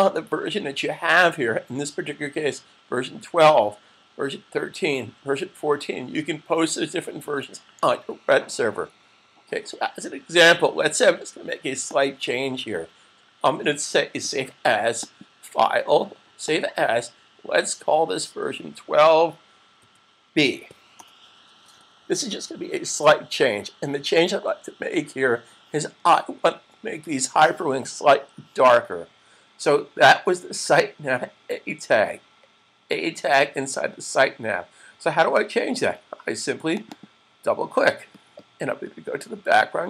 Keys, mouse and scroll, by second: 11.7 click, 15.1 click, 18.0 Right, 18.0 click, 36.5 click, 37.0 double click.